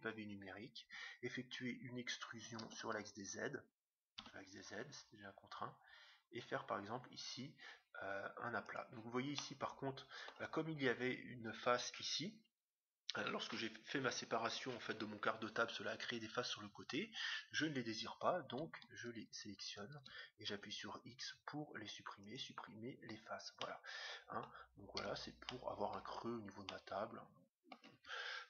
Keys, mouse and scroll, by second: 2.6 e, 9.4-11.2 middle drag, 11.2-11.9 scroll down 1, 11.9-13.2 scroll down 1, 17.6-19.5 right drag, 20.4 right click, 20.4 x, 23.6-25.3 middle drag, 24.9 Tab, 25.4-28.3 middle drag.